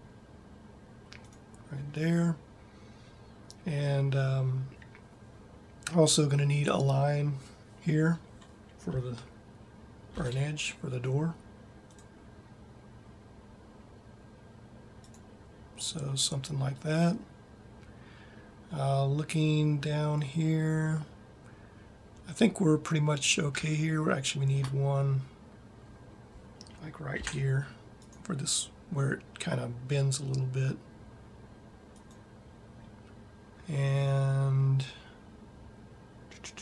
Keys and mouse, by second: 10.6 ctrl+r, 20.9-23.9 middle drag, 26.2 middle click, 27.2 ctrl+r.